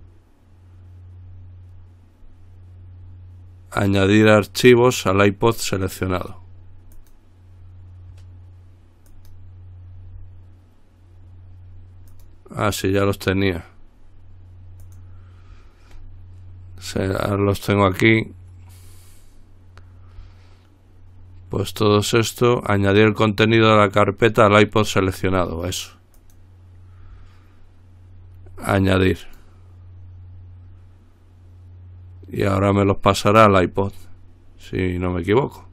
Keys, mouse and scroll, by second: 7.2 click, 9.3 click, 12.4 click, 15.1 click, 26.4 click, 29.4 click, 34.9 click.